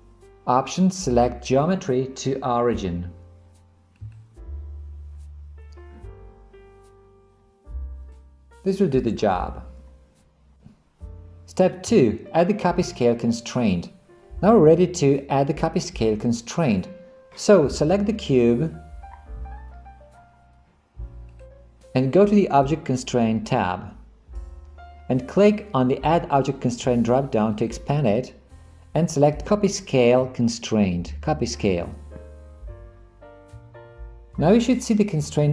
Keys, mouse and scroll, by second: 21.4 click, 23.5 click, 27.6-31.8 drag.